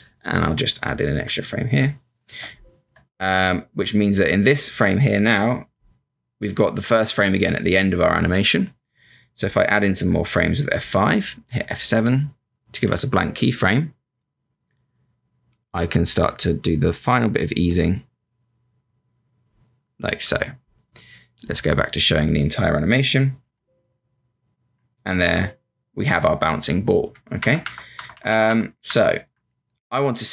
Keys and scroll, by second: 0.4 F5, 1.1 F5, 11.2 F5, 11.5 F7, 12.8 b, 23.4 Return, 25.1 Return, 30.1 Return.